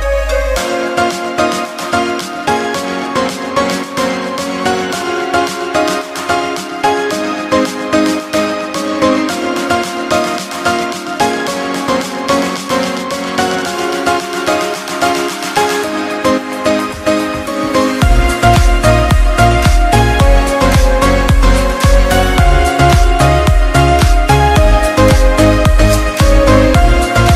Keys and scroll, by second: 25.0 ctrl+=.